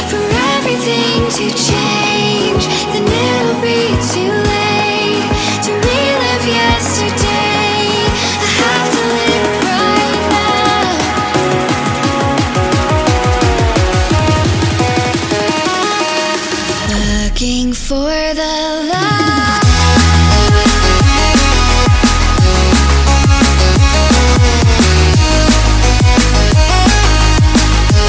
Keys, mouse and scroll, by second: 5.4 shift+a, 7.6-10.7 drag, 11.3-13.9 drag, 13.9-17.1 middle drag, 17.1 click, 17.4 scroll down 1, 17.6-18.0 scroll up 4, 18.0 middle click, 18.4 scroll down 2, 18.7-19.2 scroll up 1, 19.2 scroll down 1, 19.4 middle click, 19.9 scroll up 1, 20.6-22.1 drag, 22.1 middle click, 22.7 scroll down 1, 23.1 scroll up 1, 23.3-25.2 middle drag, 25.4-28.0 drag, 28.0 scroll down 1.